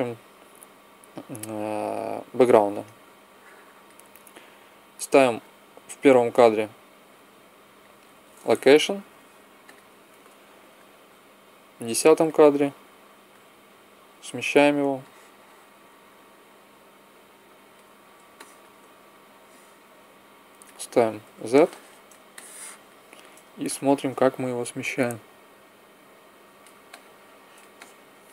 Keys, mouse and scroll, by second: 9.0 i, 12.9 click, 15.0-16.9 drag, 18.4-19.5 middle drag, 19.3-21.4 drag, 19.9 middle click, 20.9 z, 21.6 middle click, 24.5-25.7 middle drag, 25.7 click, 26.9-28.3 middle drag.